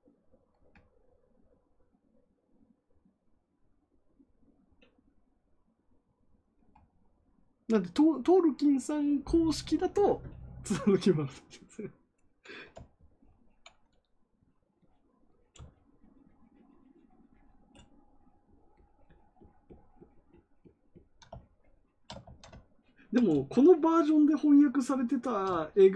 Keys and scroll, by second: 22.2 ctrl+z.